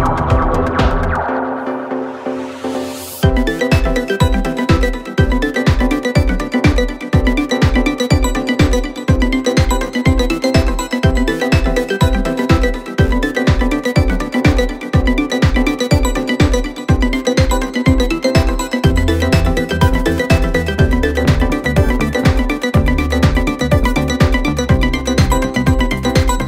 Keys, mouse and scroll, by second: 4.7-5.4 alt+scroll down 2, 5.4-6.7 alt+scroll down 1, 7.6 click, 8.1 right click, 11.7-21.7 drag, 18.2-19.5 drag, 22.8-23.4 alt+scroll up 2, 23.4 space, 23.5-24.1 click, 23.9 space, 24.2 click, 25.2 right click.